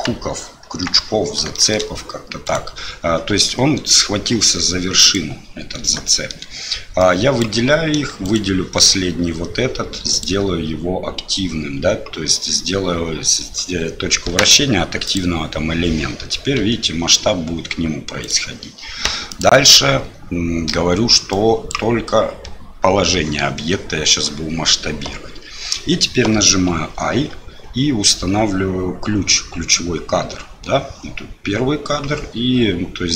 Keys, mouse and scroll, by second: 0.6 KP_3, 1.5 shift+middle click, 2.4 click, 3.5 g, 6.1 shift+middle click, 7.1 click, 8.2 shift+click, 10.1-15.2 drag, 16.6 s, 19.4-23.2 drag, 26.9 i, 32.3 i.